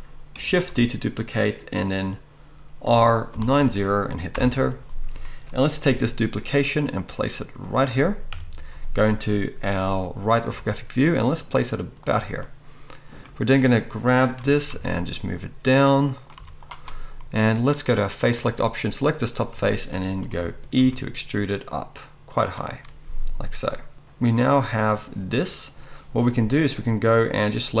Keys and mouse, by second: 0.7 shift+d, 5.9 g, 7.7-13.7 middle drag, 8.3 KP_3, 10.5 g, 13.7-16.3 drag, 14.4 g, 16.3-18.4 middle drag, 16.4 z, 18.4 click, 19.1-27.8 middle drag, 20.8 e.